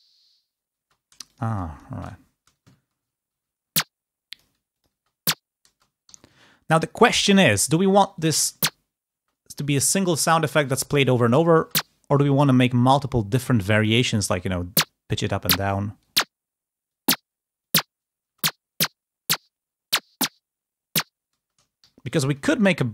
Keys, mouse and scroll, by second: 0.9 space, 1.1 click, 2.1 Delete, 3.2 ctrl+d, 4.2 click, 5.3 space, 5.5 space, 6.3 ctrl+g, 6.3 ctrl+scroll down 1, 7.3-8.3 drag, 8.3 space, 11.5 space, 13.5 d, 14.5 click, 15.5 click, 17.5 click, 18.1 space, 22.0 ctrl+g, 22.0-22.7 ctrl+scroll up 2, 22.7 ctrl+d.